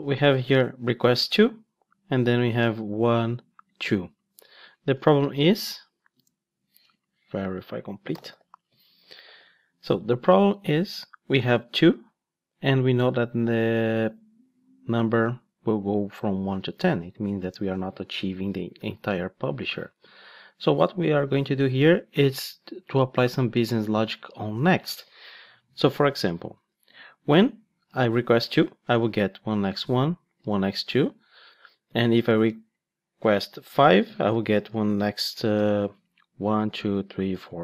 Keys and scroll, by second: 5.2 ctrl+shift+d, 8.6 Return, 9.2 ctrl+shift+d, 25.9 Tab, 37.3 ctrl+shift+d.